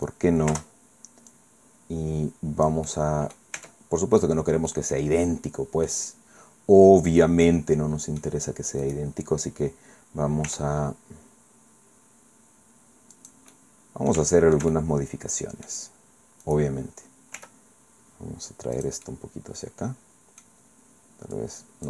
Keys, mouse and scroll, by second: 0.5 Return, 1.3-3.5 drag, 4.7 scroll down 2, 4.7-6.1 drag, 7.2-8.4 drag, 8.9 click, 10.5 r, 13.1 click, 13.5-15.9 drag, 14.2 Caps_Lock, 16.5 click, 17.3 r, 18.7-20.6 drag, 21.3-21.8 drag.